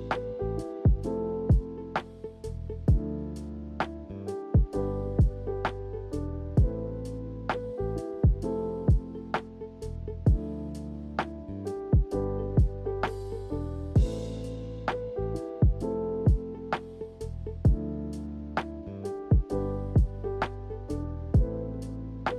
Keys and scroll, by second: 12.7 s.